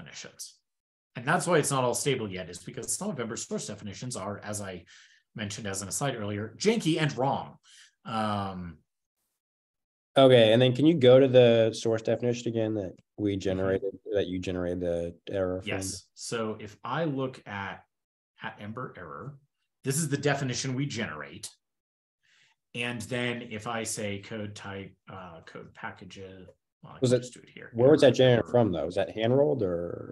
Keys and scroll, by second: 15.5 shift+super+], 15.7 shift+super+], 23.2 ctrl+super+Return, 26.7 super+Tab, 27.1 super+p.